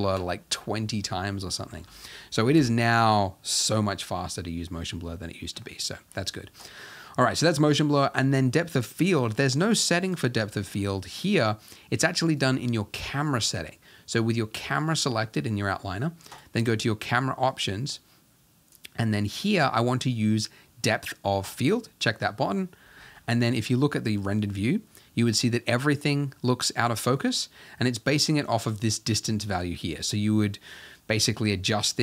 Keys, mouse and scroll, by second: 1.3-2.6 scroll up 3, 2.6 shift+Left, 12.4-13.5 drag, 13.5-14.6 scroll down 2, 14.6 click, 21.4 click, 23.5 z, 29.1-32.0 drag.